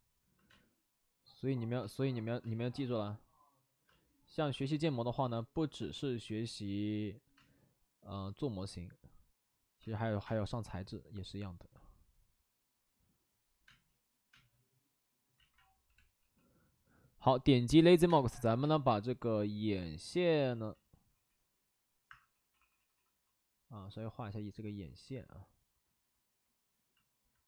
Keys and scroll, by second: 0.4 space, 1.8 space, 2.4 space, 3.8 space, 4.5 space, 6.4 space, 7.3 space, 9.7 space, 10.1 3, 10.3 space, 13.6 space, 14.3 space, 15.3 ctrl+z, 15.8 b, 16.7 p, 18.0 space, 18.5 space, 20.7 ctrl+z, 21.0 ctrl+d, 22.0 Escape, 22.3-23.1 typing.